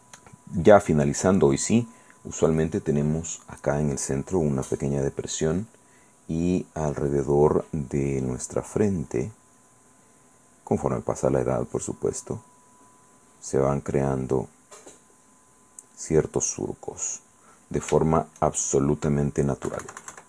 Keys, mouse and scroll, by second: 0.8-2.7 drag, 4.5 click, 7.9 click, 9.0 click, 11.2 click, 11.6 click, 11.9 click, 12.5-14.6 drag, 14.9-17.7 drag, 18.1-19.1 shift+middle drag, 19.9 KP_Subtract.